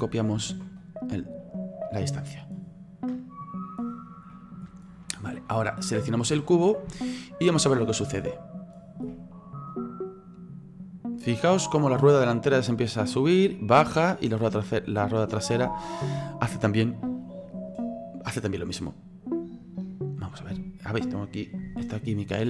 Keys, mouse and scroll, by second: 1.9-2.9 middle drag, 2.9-3.6 scroll down 2, 3.6-4.3 scroll down 7, 4.3-5.1 middle drag, 5.1 right click, 5.7-6.2 middle drag, 6.2-6.9 scroll up 5, 6.9-9.7 shift+middle drag, 9.7-15.3 drag, 15.3-17.7 middle drag, 17.7-20.5 drag, 20.5-22.4 middle drag.